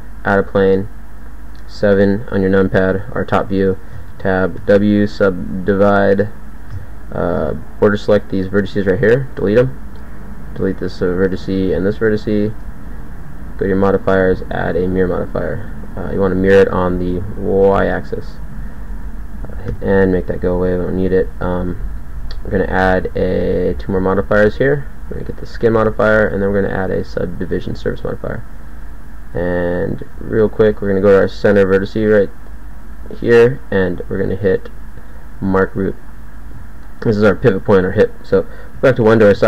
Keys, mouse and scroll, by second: 1.8 KP_7, 3.7 Tab, 4.6 w, 6.7 a, 7.4 b, 8.7 x, 10.5 click, 10.7 x, 11.7 x, 12.5 Tab, 19.7 n, 30.1 Tab, 38.7 KP_1.